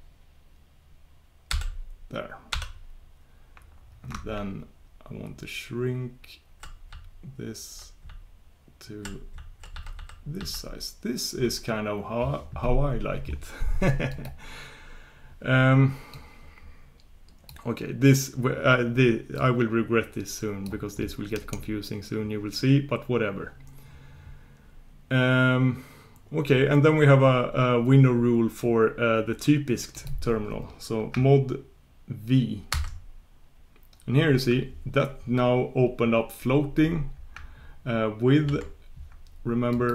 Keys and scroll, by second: 1.5 shift+super+j, 2.5 shift+super+k, 5.8 ctrl+super+j, 6.5 ctrl+super+j, 6.6 ctrl+super+j, 7.5 ctrl+super+j, 7.7 ctrl+super+j, 8.1 ctrl+super+j, 8.7 ctrl+super+j, 19.5 ctrl+super+j, 32.7 super+v.